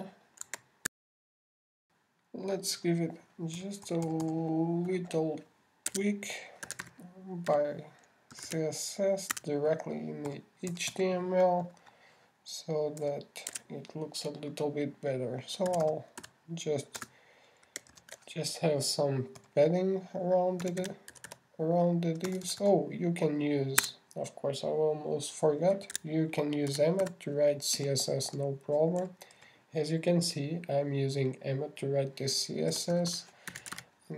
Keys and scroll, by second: 2.3 shift+super+i, 19.0 alt+space, 19.3 alt+shift+8.